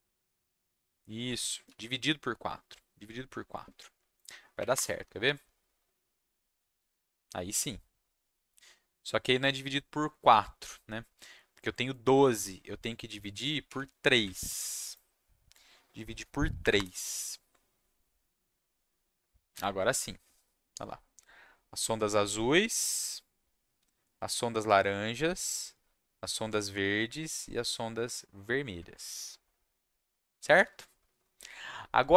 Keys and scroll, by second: 1.6 ctrl+s, 4.5 Up, 4.7 Return, 13.6 3, 14.4 ctrl+s, 16.6 Up, 16.7 Return.